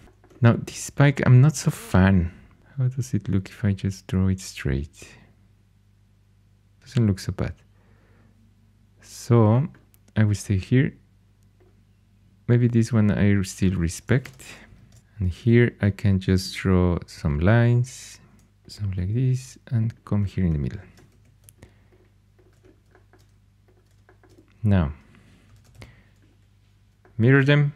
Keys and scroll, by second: 10.4 shift+a, 14.1 ⟲, 14.7 ctrl+super+c, 21.0 2, 25.5 alt+x, 25.6 alt+x.